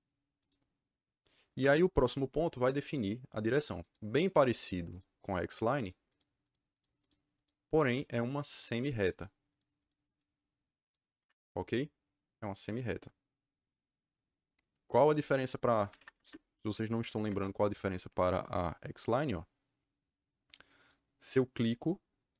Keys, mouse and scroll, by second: 0.3 click, 3.7 click, 4.2 click, 4.8 click, 5.1 click, 5.4 click, 5.7 click, 6.0 click, 6.3 click, 6.6 click, 7.2 click, 7.8 click, 8.2 click, 8.7 click, 9.0 click, 9.5 click, 9.8 click, 10.0 click, 10.8 click, 11.1 Escape, 15.0 click, 15.8 Escape, 16.1 Escape, 16.7-17.7 typing, 20.7 click, 22.2 click.